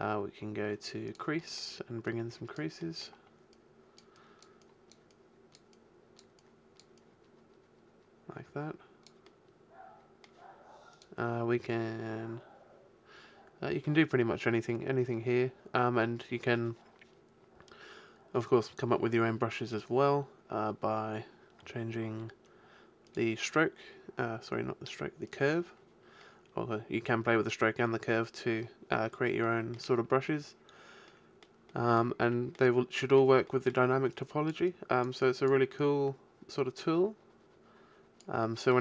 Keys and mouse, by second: 1.0-5.1 middle drag, 9.3-11.0 middle drag, 11.0-12.9 drag, 23.1-24.8 drag, 25.3-27.2 drag, 29.4-34.2 middle drag, 34.2-37.6 drag, 38.4 middle click.